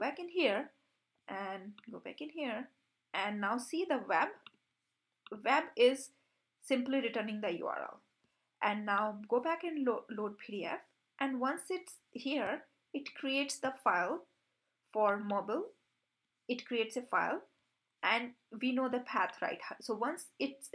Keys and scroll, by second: 0.0 super+b, 13.3 super+b.